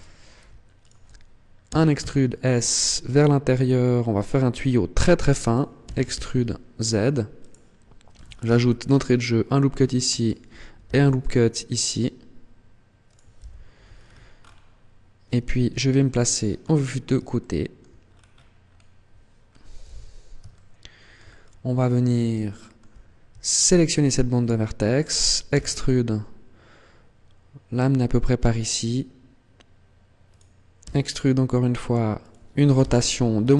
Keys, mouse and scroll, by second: 0.6 alt+right click, 1.6 e, 5.2 click, 5.6 e, 7.4 click, 8.2 ctrl+r, 10.0 click, 10.6 ctrl+r, 12.9 click, 13.2 z, 13.6-14.0 scroll down 5, 14.2-14.6 scroll up 4, 15.4 KP_3, 16.1-17.0 scroll down 6, 17.2 shift+middle click, 17.8-18.2 scroll down 2, 18.2-18.8 scroll up 8, 19.2-19.6 scroll up 3, 19.6 z, 20.2 shift+middle click, 21.2 scroll down 1, 21.8 scroll up 1, 22.2 shift+middle click, 23.5 alt+right click, 25.3 e, 30.1 click, 30.6 e, 32.0 click, 32.6 r.